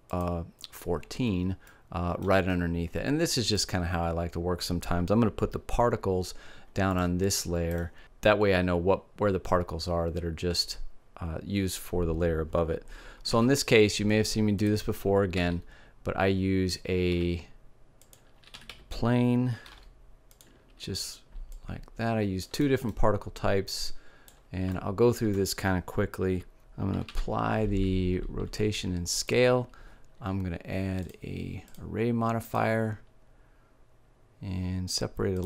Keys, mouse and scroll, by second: 0.2-2.0 drag, 2.0-3.5 middle drag, 3.7 middle click, 13.4 shift+a, 15.4 s, 18.6 r, 21.6-22.7 drag, 22.7 middle click, 23.6-25.8 drag, 25.8 middle click, 27.0 ctrl+a, 31.0-33.4 drag, 35.3-35.4 drag.